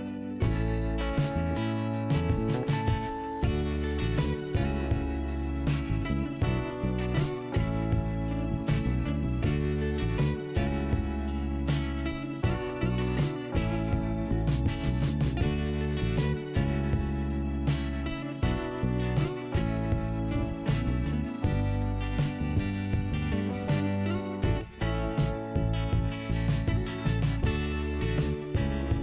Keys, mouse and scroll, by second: 2.8 click, 2.9 click, 3.9 scroll down 1, 5.2 click, 5.2 5, 7.5 click, 8.7 click, 8.8 click, 10.9 scroll up 1, 10.9 l, 12.3 click, 12.4 click, 13.0-14.1 scroll up 1, 14.2 click, 15.3 click, 16.6 click, 16.7 click, 17.9 click, 18.9 click, 21.2 scroll down 2, 22.7 click, 27.5 click, 27.6 click, 28.0 scroll down 1.